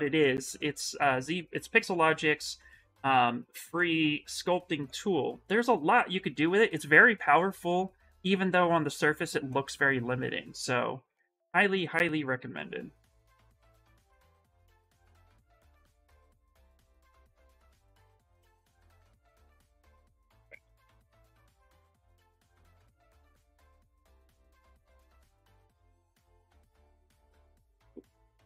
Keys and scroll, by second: 3.5 ctrl+z, 18.1 q, 18.7 s, 20.2 m, 20.7 s, 26.6 ctrl+s, 27.4 Escape, 28.1 s.